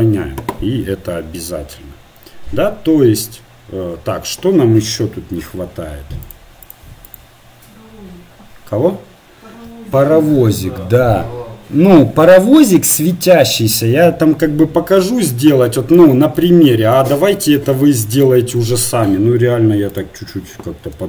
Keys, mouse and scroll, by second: 1.7 middle click, 2.4-3.3 scroll down 1, 3.3-4.4 scroll down 1, 6.3-9.2 drag, 15.6 KP_1.